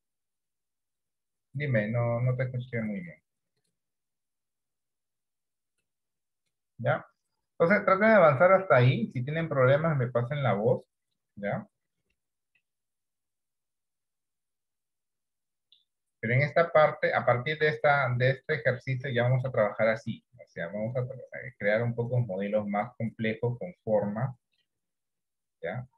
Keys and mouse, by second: 2.6 shift+middle click, 11.3-12.3 middle drag, 13.0-16.8 middle drag, 17.4 shift+middle click, 18.7 shift+middle click, 18.9 middle click, 19.8 shift+middle click, 20.3-24.7 middle drag, 25.3-25.9 middle drag.